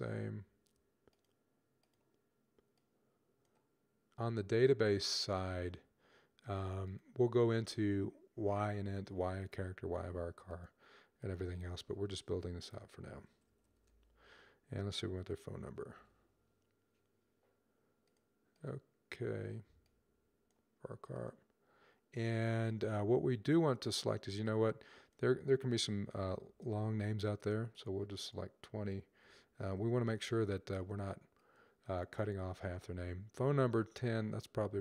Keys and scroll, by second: 12.8-16.2 typing, 25.8-26.4 typing, 29.1-29.5 typing.